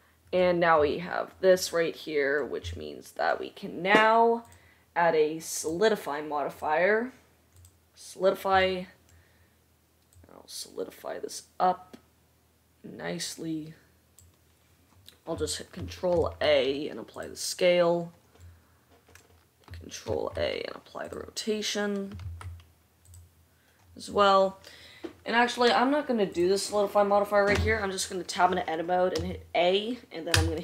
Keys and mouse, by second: 1.6-4.7 middle drag, 4.7-6.0 drag, 6.0-6.8 middle drag, 6.8-22.8 drag, 16.4 ctrl+a, 20.4 ctrl+a, 22.7 ctrl+a, 28.0 Tab, 29.5 a.